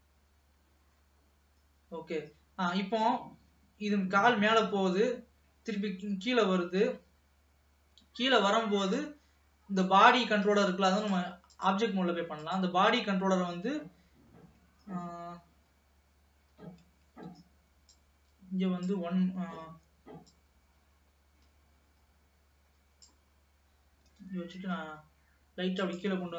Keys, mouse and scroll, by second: 2.1 space, 3.1-6.1 drag, 9.8 scroll down 1, 10.0 middle click, 10.8 ctrl+s, 11.1-12.7 drag, 16.5 g, 18.0-23.6 drag, 24.1 g.